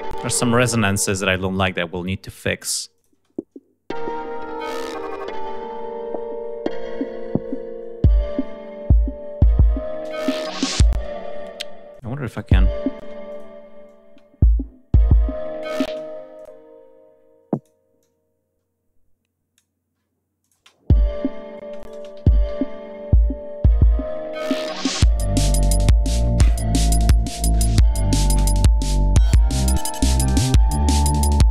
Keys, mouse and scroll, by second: 0.0 space, 2.8 click, 3.0 space, 5.3-5.7 scroll down 2, 5.9 scroll down 2, 6.2-6.5 scroll up 2, 6.7-7.1 scroll down 2, 7.7 scroll down 2, 8.1-9.0 ctrl+scroll up 6, 10.8 space, 11.0-11.4 scroll up 2, 11.6 scroll up 2, 11.8 click, 12.2 space, 12.3 ctrl+scroll up 2, 12.9 space, 13.2 ctrl+click, 13.4 e, 13.7-15.7 ctrl+drag, 13.9 space, 15.8 space, 16.2 alt+click, 17.4 click, 17.9-19.6 alt+drag, 20.3 alt+click, 20.5 space, 21.5 space, 21.6 click, 22.1 scroll down 1, 23.2 ctrl+scroll down 2, 24.0 ctrl+scroll down 2, 24.4 ctrl+scroll up 2, 25.2-26.4 ctrl+scroll down 6, 29.7 ctrl+scroll down 2, 30.0 ctrl+scroll up 2.